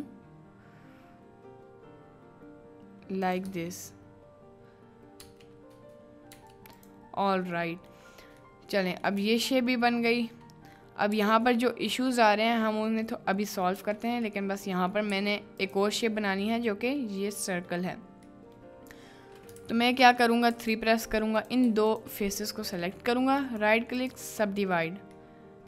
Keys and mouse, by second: 3.2 click, 3.5 Tab, 5.2 Tab, 6.3 Tab, 6.7 click, 7.7 middle click, 8.5 middle click, 9.0 middle click, 9.3 Tab, 9.5 middle click, 10.2 middle click, 11.1 3, 11.9 Tab, 12.5-13.2 middle drag, 13.5 middle click, 13.8 Tab, 14.3 click, 15.1 2, 16.5 click, 17.6 click, 18.3 click, 19.6 ctrl+z, 20.5 3, 21.4 click, 21.8 shift+click, 22.3 middle click, 23.4 click, 25.3 middle click.